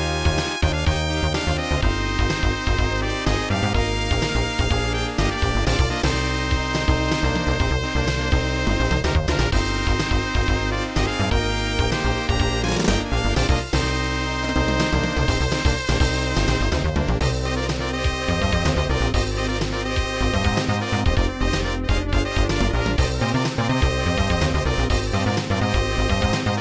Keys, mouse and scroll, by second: 0.0 click, 0.1 click, 0.2 double click, 2.1 right click, 7.5 click, 8.7 click, 14.5 click, 14.5 click, 25.2 click, 25.4 double click.